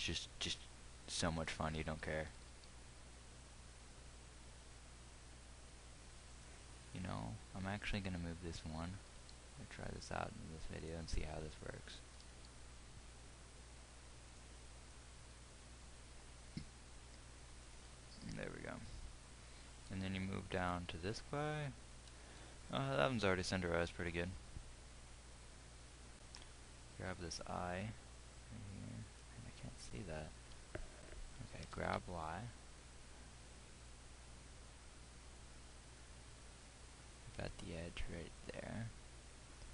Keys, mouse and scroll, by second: 2.8 g, 7.0-9.4 drag, 9.4 g, 12.7 g, 32.4 g.